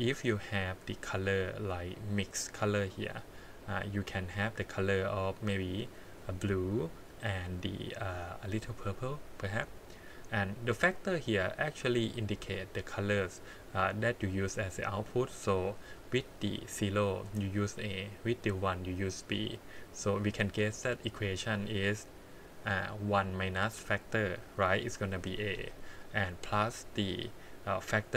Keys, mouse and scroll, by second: 3.2 scroll up 3, 3.7 middle click, 4.5 click, 6.8 click, 10.5 click, 11.8 click, 15.1-17.2 drag, 18.2-28.1 drag.